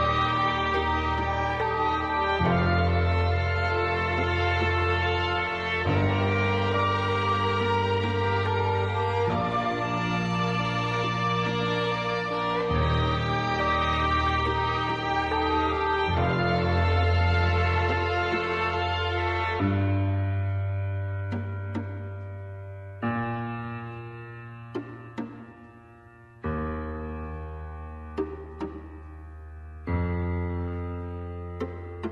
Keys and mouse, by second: 1.8 click, 3.6 click, 3.9 g, 6.0 shift+middle click, 6.9 click, 7.8 g, 9.9 g, 12.6 shift+middle click, 13.1 click, 14.4 x, 15.8 middle click, 17.6 click, 18.9 shift+middle click, 20.2 click, 21.7 shift+middle click, 23.3 ctrl+r, 24.5 g, 27.8 shift+middle click.